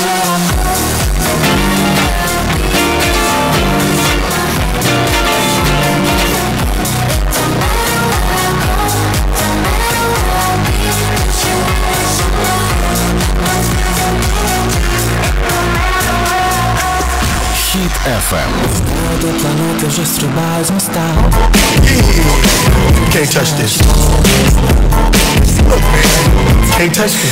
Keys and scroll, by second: 7.1 Page_Down.